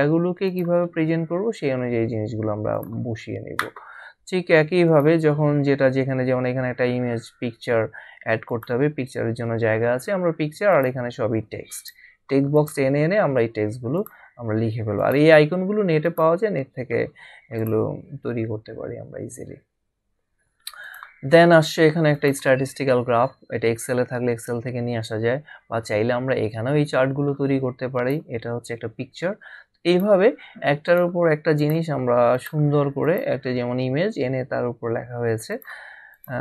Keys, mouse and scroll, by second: 1.3-2.1 scroll down 1, 4.2 scroll down 1, 8.5 click, 10.7 click, 13.9 click, 17.5 click, 19.9 scroll down 1, 27.9 click, 29.9 click, 35.5 click.